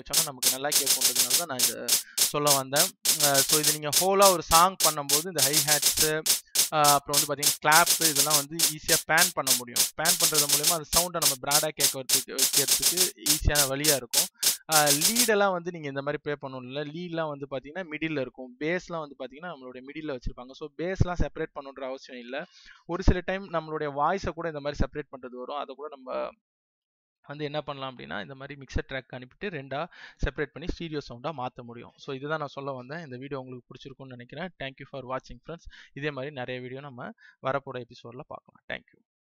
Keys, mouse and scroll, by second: 15.5 space, 16.3 click.